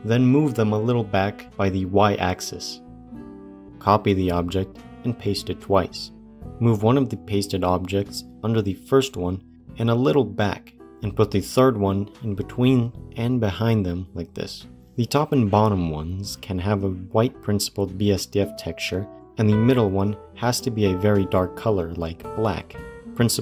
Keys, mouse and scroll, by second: 0.0 click, 0.0 g, 3.6 middle click, 4.4 ctrl+c, 4.8 ctrl+v, 5.8 ctrl+v, 6.1 click, 6.3 g, 8.5 g, 10.7 click, 11.2 g, 13.2 g, 14.7 middle click, 16.2 scroll up 2, 17.7 click, 19.9-21.6 drag.